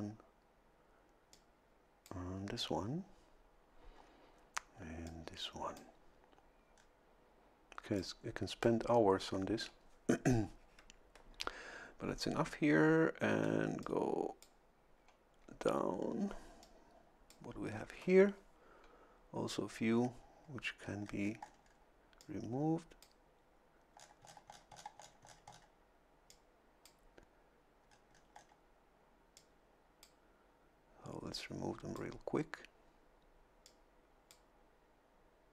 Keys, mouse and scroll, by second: 1.3 click, 5.1 click, 6.7 scroll up 2, 8.0-9.0 drag, 13.5 a, 13.8 click, 16.6 click, 20.8-21.9 scroll up 2, 22.2-23.2 drag, 24.0-25.8 scroll down 2, 26.3 click, 27.8-28.6 scroll up 2, 29.3 click, 31.3 click, 33.6 click.